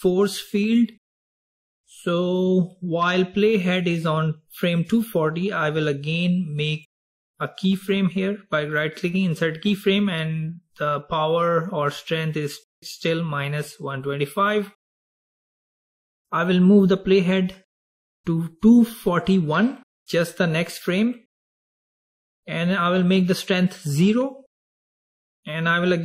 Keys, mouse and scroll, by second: 7.0 right click, 18.1 click, 23.0-26.0 drag.